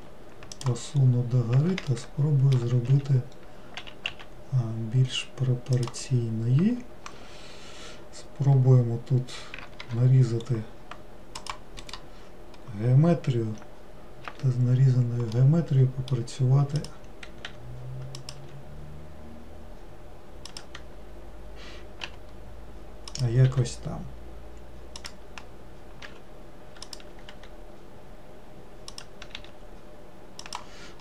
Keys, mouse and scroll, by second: 1.1-2.0 scroll up 3, 2.0-3.0 shift+middle drag, 3.0 s, 15.5-16.9 middle drag, 16.9 click.